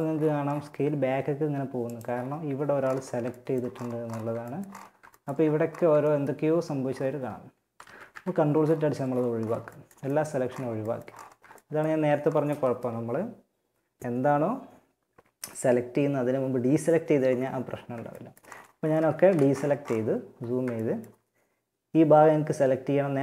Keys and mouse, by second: 0.2 s, 7.0 ctrl+z, 7.3 ctrl+z, 8.1 a, 18.1 a, 18.4 a, 22.4-23.2 drag.